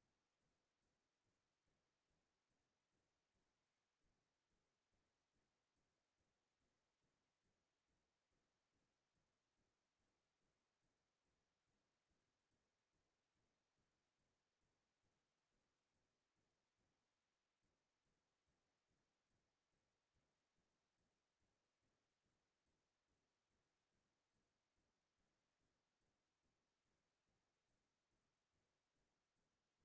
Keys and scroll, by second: 3.5 ctrl+c, 17.8 ctrl+space, 23.2 ctrl+s, 27.1 ctrl+alt+shift+s.